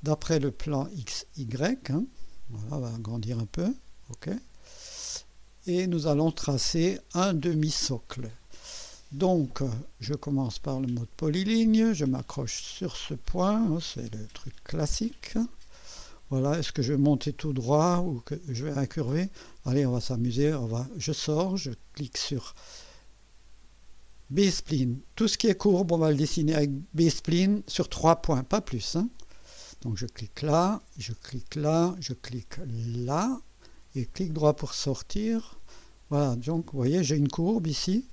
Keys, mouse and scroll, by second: 1.2 click, 2.0-2.3 scroll up 1, 2.6-3.4 right drag, 4.3 click, 5.3 scroll up 1, 6.1 right click, 10.8 click, 12.8 click, 15.5 click, 21.0 right click, 24.4 click, 30.1 click, 31.6 click, 33.1 click, 34.1 right click, 35.0 right click, 35.9 scroll up 1, 36.4 right click, 37.8 right click.